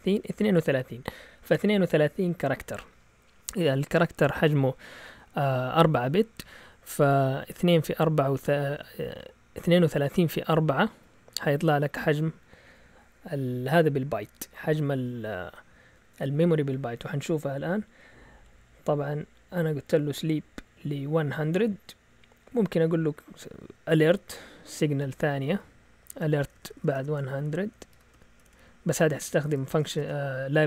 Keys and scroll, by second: 17.3 Down, 17.9-18.4 typing, 22.0 Up, 22.4 typing, 24.7-30.5 typing.